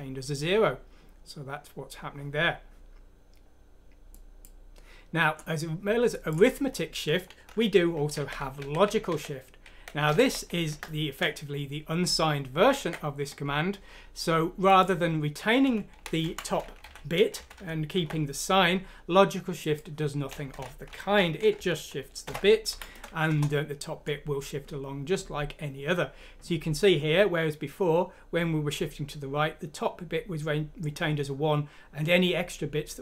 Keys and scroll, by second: 7.5 Home, 12.3 typing, 15.6 Home, 16.0-16.6 typing, 19.0 typing, 22.7 F6, 22.7 typing, 23.3 Return, 25.2 typing.